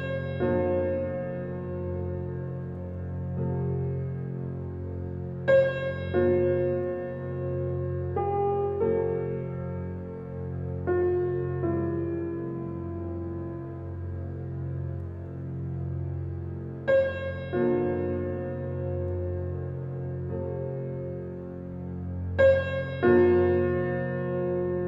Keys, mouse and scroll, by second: 1.7 click, 2.6-3.4 typing, 4.8 typing, 6.8 click, 7.3 scroll up 1, 8.2 click, 12.1 right click, 12.8 click, 14.8 right click, 16.4 click, 19.9-20.3 scroll down 1, 20.5-21.1 scroll up 1, 21.1 click, 21.6 scroll down 1, 22.7-23.9 typing.